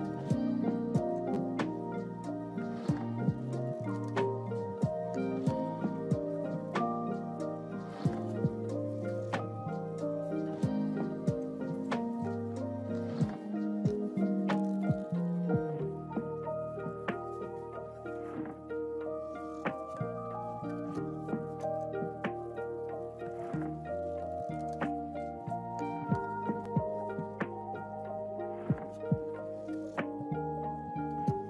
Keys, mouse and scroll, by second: 2.1 click, 10.8 click, 14.3-15.6 drag, 17.2 click.